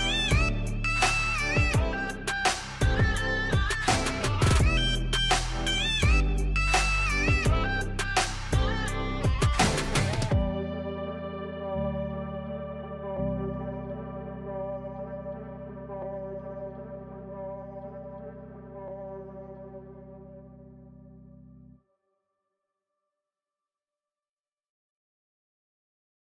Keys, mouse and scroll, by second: 8.3 click, 10.6 click, 17.8 click, 24.6 click.